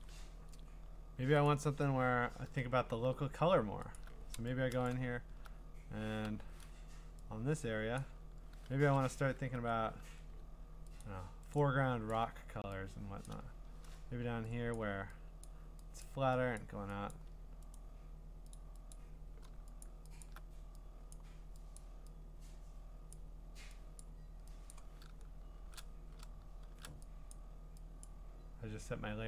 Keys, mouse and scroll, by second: 0.9 middle click, 1.6 click, 2.7 b, 4.0 alt+click, 4.9 click, 5.2 scroll, 6.2 u, 8.0 click, 8.7 !, 11.0 alt+click, 11.6 alt+click, 12.1 alt+click, 13.2 click, 13.8 ctrl+z, 14.7 click, 15.4 click, 16.0 click, 16.6 click, 17.1 click, 17.7 right click, 18.5 click, 18.9 click, 19.8 alt+click, 20.2 alt+click, 21.1 click, 21.8 click, 23.1 click, 24.0 click, 24.7 click, 25.6 alt+shift+d, 26.6 alt+shift+s, 27.3 click, 28.0 click.